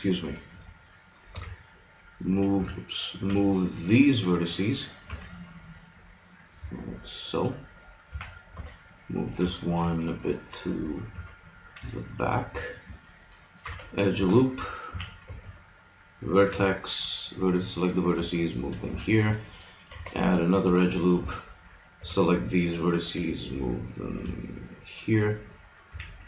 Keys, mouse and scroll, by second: 1.3 b, 2.5 a, 3.2 b, 5.1 g, 7.4-8.5 drag, 8.1 a, 8.6 b, 9.5-11.1 drag, 11.1 g, 12.4 a, 13.6 ctrl+r, 14.9 a, 15.2 b, 16.5 g, 18.9 a, 19.9 ctrl+r, 21.2 a, 22.0 b, 23.2 g, 25.9 a.